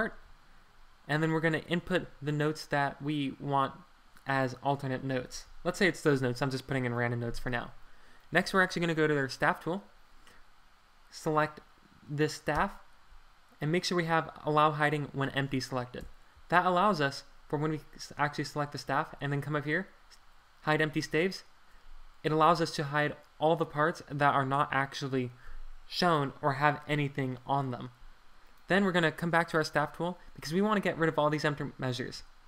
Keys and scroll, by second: 5.2 Escape, 12.5 Return, 16.0 super+Return, 22.3 Escape.